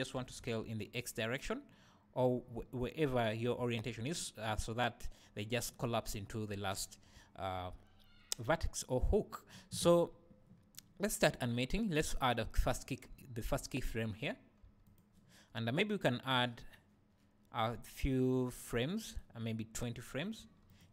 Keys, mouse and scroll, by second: 0.2 s, 2.3 right click, 3.6 `, 12.2-15.0 right drag, 14.6 g, 15.0 click, 16.1-20.8 right drag, 20.4 g, 20.8 click.